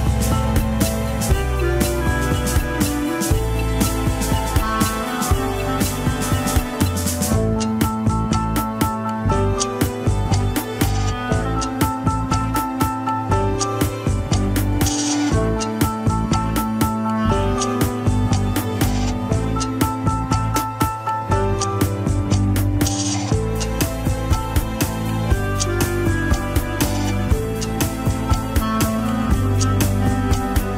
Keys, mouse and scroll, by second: 0.8-2.0 drag, 2.0 middle click, 2.8 click, 3.3 middle click, 4.2-4.9 scroll up 1, 4.9 middle click, 5.7 alt+z, 6.5 ctrl+click, 6.5 alt+z, 6.8-8.1 middle drag, 8.1 alt+z, 8.8 alt+z, 9.5 middle click, 10.2 alt+z, 11.7 click, 12.2 middle click, 12.8 click, 13.5-14.9 middle drag, 14.9 click, 15.2 middle click, 15.5 KP_1, 16.0 ctrl+Tab, 16.8 KP_3, 17.7 drag, 18.1 click, 18.5 scroll down 1, 19.4 ctrl+Tab, 20.1 alt+r, 20.4 alt+g, 20.5 alt+z, 20.7 click, 21.3 alt+z, 21.7 r, 23.3-24.2 scroll down 5, 24.2 a, 24.7 alt+r, 25.1 alt+g, 25.2 ctrl+Tab, 25.7 alt+h, 25.9-26.4 scroll up 2, 26.4 click, 26.7 scroll down 1, 27.2 shift+click, 27.9 ctrl+Tab, 28.4 scroll down 1, 28.7 shift+middle click, 29.3 scroll down 1, 29.5-30.5 shift+middle drag, 30.5-30.7 drag.